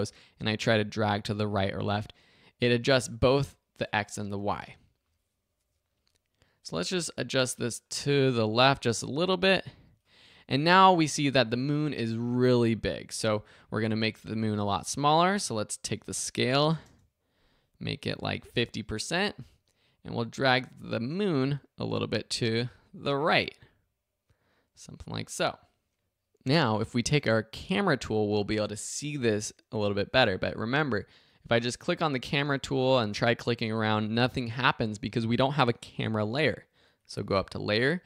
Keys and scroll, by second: 4.5 super+z, 14.3 s, 16.4-17.2 typing.